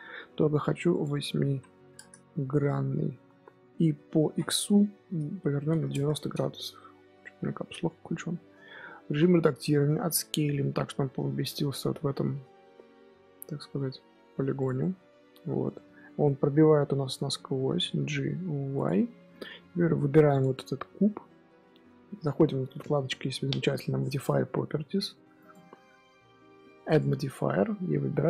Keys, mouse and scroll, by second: 0.8-2.6 drag, 2.6 KP_1, 4.1 r, 7.1-8.5 middle drag, 8.5 Tab, 9.0 z, 9.9 s, 14.7 middle click, 15.2 Tab, 15.6 z, 16.1-17.5 middle drag, 17.5 g, 18.9-20.2 middle drag, 20.2 click, 25.3 click.